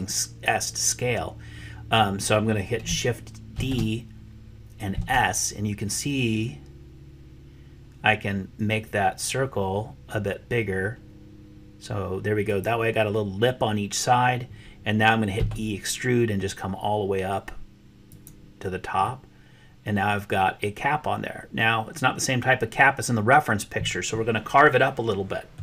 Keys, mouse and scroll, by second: 3.5 shift+d, 15.3 e, 19.0-20.5 middle drag, 20.5-23.1 middle drag, 23.1 click, 23.2 middle click, 23.3 click, 23.4 middle click, 24.2 click, 24.4-25.6 drag.